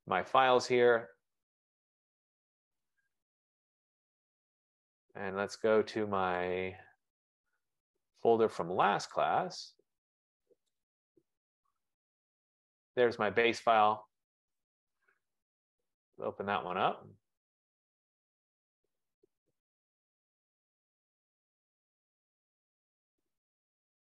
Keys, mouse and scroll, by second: 3.9 click, 6.5 click, 6.8 click, 9.2 click, 9.5 click, 10.9 click, 11.1 click, 12.9 click, 14.4 click, 14.6 click, 22.8 click.